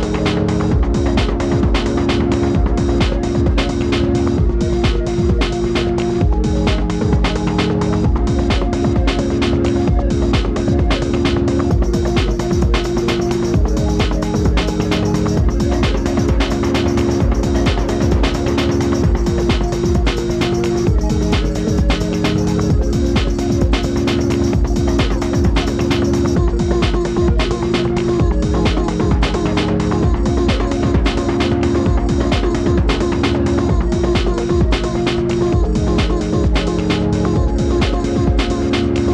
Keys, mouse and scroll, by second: 5.8-9.9 alt+shift+drag, 10.5 alt+shift+click, 18.9 click, 19.2 z, 20.4 click, 22.2 alt+shift+click, 26.9-28.0 drag, 28.5 click, 32.4 alt+click, 39.0-39.1 alt+drag.